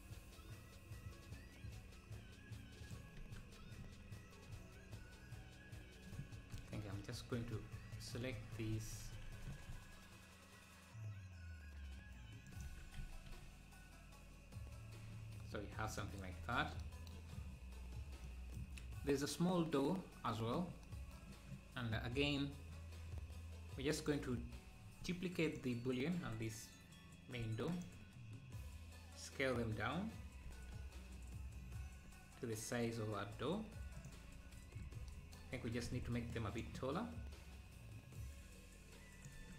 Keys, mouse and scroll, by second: 3.3 Tab, 4.1 z, 4.5-6.6 middle drag, 6.6 KP_1, 7.5 z, 9.5 s, 13.1 z, 15.9 click, 16.5 ctrl+s, 17.5-18.2 scroll up 7, 20.9 middle click, 21.8-22.5 scroll down 3, 22.5 scroll up 2, 24.0-27.4 drag, 27.5 shift+d, 30.5 s, 34.6 KP_1, 35.5 Tab, 35.9 z, 36.3-38.2 drag, 39.4 Tab.